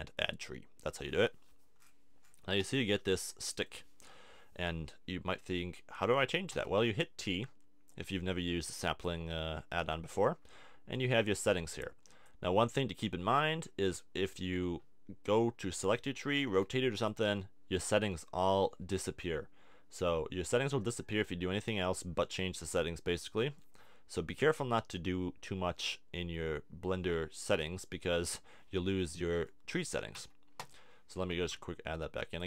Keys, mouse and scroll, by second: 2.7 KP_1, 4.3 KP_3, 6.5 t, 7.9 click, 16.4 r, 24.2-26.9 middle drag, 30.1 x, 31.3 shift+a.